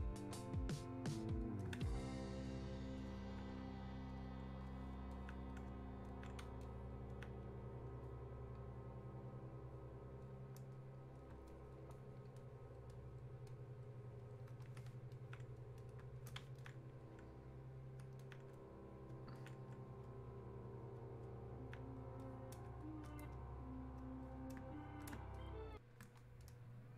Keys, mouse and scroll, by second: 1.1-11.5 drag, 11.9-22.2 shift+drag, 22.2-24.2 drag, 24.2-26.9 drag.